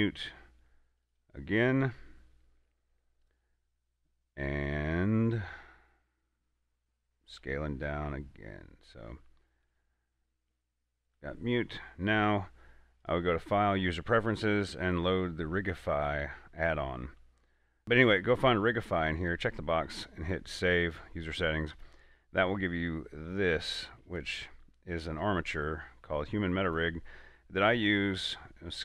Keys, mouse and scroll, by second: 7.6 s, 10.0 click, 10.8 s, 11.4 click, 11.9-13.3 middle drag, 13.3 click, 17.8-18.5 scroll down 1, 18.5 scroll up 1, 18.6-20.9 scroll down 1, 22.1 click, 22.6 middle click, 23.0 scroll up 1, 23.6 middle click, 24.6 shift+a, 27.0 click, 27.9 s.